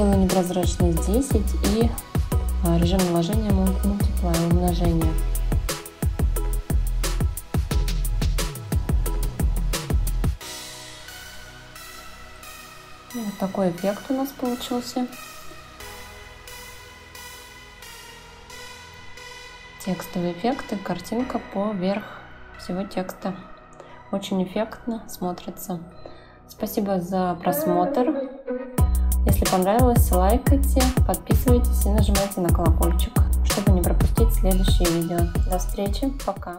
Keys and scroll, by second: 0.4 1, 12.3 ctrl+x.